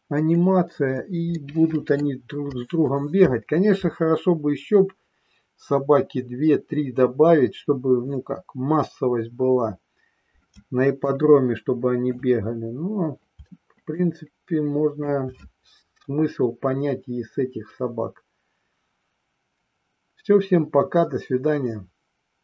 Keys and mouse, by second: 1.4 middle click, 11.0-12.3 shift+middle drag, 14.0 shift+middle click.